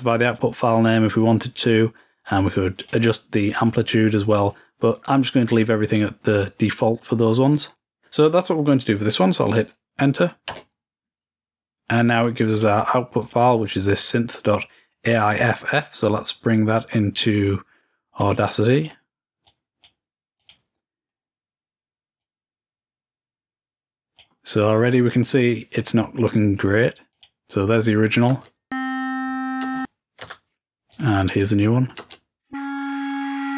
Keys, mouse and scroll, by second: 0.9 click, 2.5 click, 3.7 click, 7.9-9.3 drag, 12.4-14.3 drag, 15.6-18.7 drag, 18.9 click, 19.6 click, 20.6 click, 22.4-25.0 drag, 25.0 click, 27.3 click, 31.1-32.3 drag.